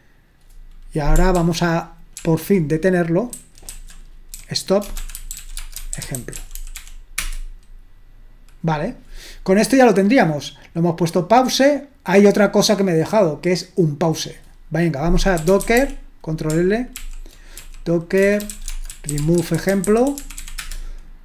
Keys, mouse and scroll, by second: 1.4 ctrl+p, 2.1 ctrl+p, 3.4 ctrl+w, 3.7 ctrl+w, 4.3-7.3 typing, 11.0-12.7 scroll down 2, 12.7-15.4 drag, 13.5 Delete, 15.2-16.3 typing, 17.0 ctrl+l, 17.6-21.2 typing.